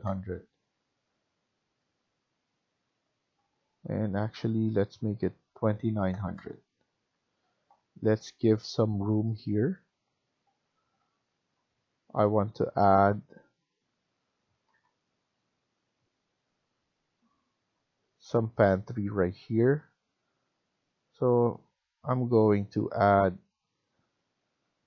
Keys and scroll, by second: 0.0-0.2 typing, 0.5 Return, 5.4-6.5 typing, 6.9 Return, 7.5 Escape, 11.0 typing, 14.2-15.0 typing.